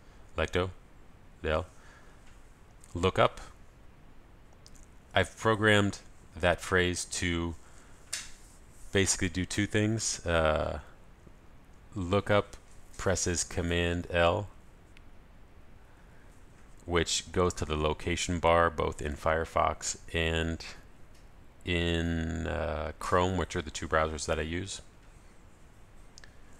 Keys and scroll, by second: 1.1 ctrl+alt+shift+super+a, 3.8 ctrl+alt+super+s, 3.8 super+l, 4.0 super+v, 12.9 ctrl+alt+super+s, 12.9 super+l, 13.1 super+v.